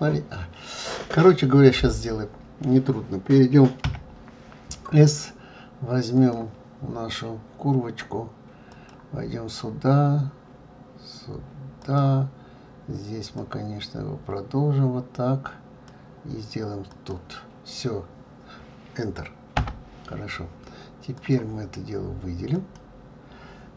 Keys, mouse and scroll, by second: 3.8 KP_7, 6.1-9.1 drag, 21.1-22.7 drag.